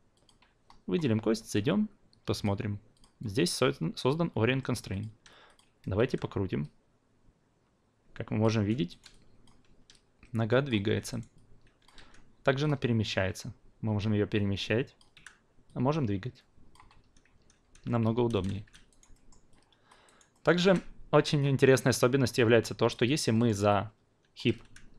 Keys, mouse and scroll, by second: 1.3 f, 2.3 click, 2.9 click, 4.6 alt+middle click, 4.9 alt+click, 5.4 click, 6.0 e, 6.6-8.4 drag, 8.5 ctrl+z, 8.9 alt+right click, 9.1-9.4 alt+drag, 9.9-10.7 drag, 10.8 ctrl+z, 11.4-12.0 alt+drag, 12.0 w, 12.6-17.1 drag, 17.1 ctrl+z, 18.5 shift+z, 18.9 alt+right drag, 19.1 alt+middle drag, 19.5-19.9 alt+drag, 20.0 alt+right drag, 20.3 alt+middle click, 20.6-21.4 alt+drag, 22.9 drag, 23.3 alt+middle drag, 23.7-24.4 alt+drag, 24.6 w.